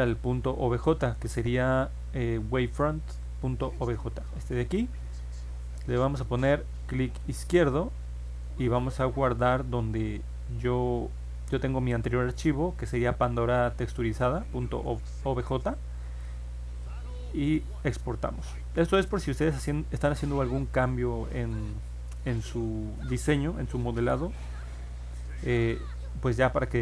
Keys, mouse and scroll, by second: 6.9 click, 9.4 click, 16.8 click.